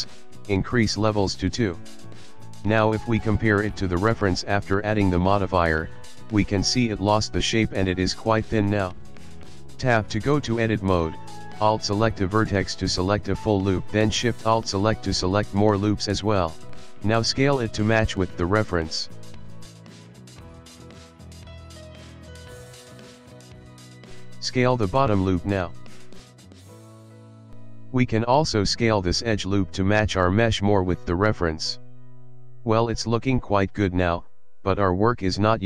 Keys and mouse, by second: 1.8 click, 4.6 click, 5.5 KP_1, 6.3 Tab, 7.1 ctrl+middle click, 7.8 shift+middle click, 9.3 alt+click, 11.7 alt+click, 12.9 alt+shift+click, 14.3 alt+shift+click, 15.9 s, 18.6 ctrl+middle click, 18.9 ctrl+middle click, 19.3 shift+middle click, 19.7 shift+middle click, 20.1 ctrl+middle click, 20.3 ctrl+middle click, 20.9 shift+middle click, 21.5 shift+middle click, 23.6 alt+click, 24.2 s, 27.1 ctrl+middle click, 27.6 shift+middle click, 28.1 shift+middle click, 29.7 alt+click, 30.3 s, 34.0 Tab, 34.6 middle click, 35.1 ctrl+middle click, 35.5 middle click.